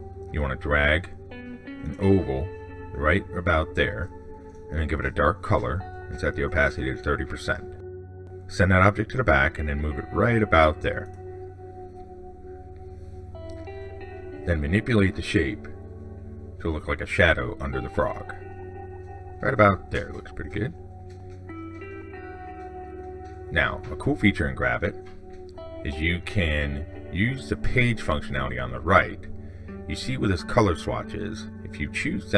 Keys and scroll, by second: 8.7 ctrl+shift+Down.